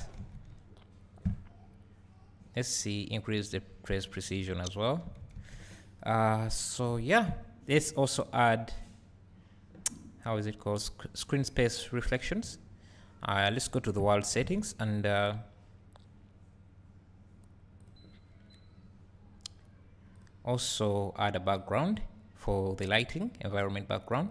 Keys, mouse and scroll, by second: 0.5 `, 4.4 `, 13.7 click, 14.6 ctrl+s, 18.1 click, 20.3 click, 23.2-24.3 drag.